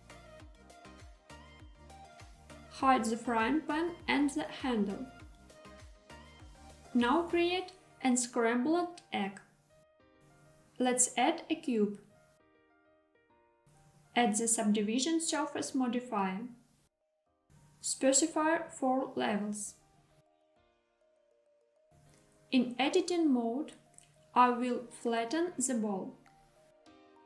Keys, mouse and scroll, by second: 3.3 click, 4.7 click, 10.3 shift+a, 18.7-19.7 drag, 20.4 click, 21.4 click, 24.6 KP_1, 25.5 s, 25.9 z.